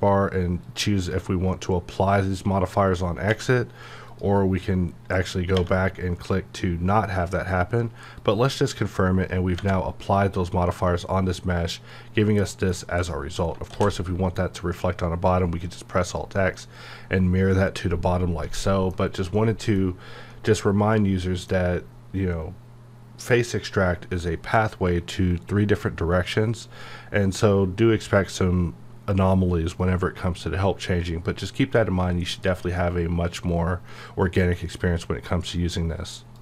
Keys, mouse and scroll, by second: 0.6-3.3 drag, 4.1 click, 8.2 click, 10.7-13.1 middle drag, 13.7 alt+c, 16.0 click, 16.8-18.9 middle drag, 18.9 scroll up 1, 19.4 middle click, 19.8-20.3 scroll down 1, 20.3-36.4 middle drag.